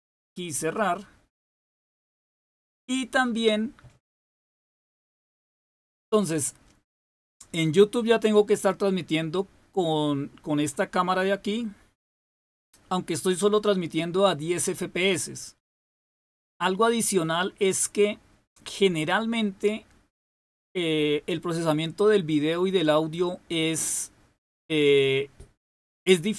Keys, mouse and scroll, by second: 0.0 click.